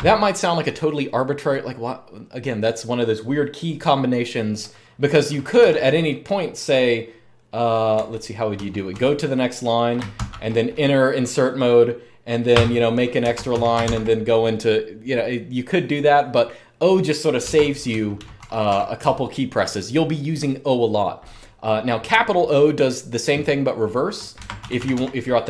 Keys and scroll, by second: 5.3 typing, 7.7-8.7 typing, 9.9 typing, 12.3 Return, 13.1 Escape, 13.3-13.6 typing, 17.3 Escape, 17.4-18.9 typing, 24.2 Escape, 24.3-24.7 typing.